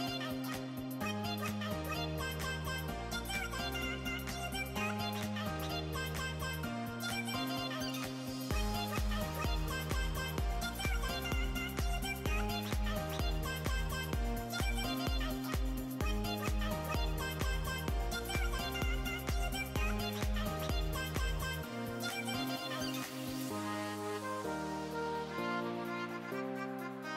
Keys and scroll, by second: 14.8 super+t.